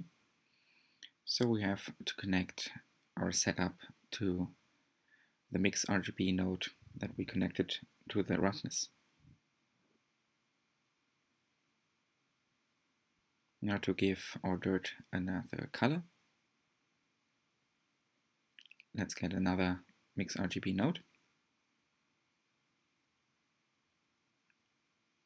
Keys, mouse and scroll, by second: 2.6 scroll down 1, 3.4-3.7 scroll up 1, 6.3-6.9 scroll down 2, 8.2-10.0 drag, 10.9 click, 24.9 click.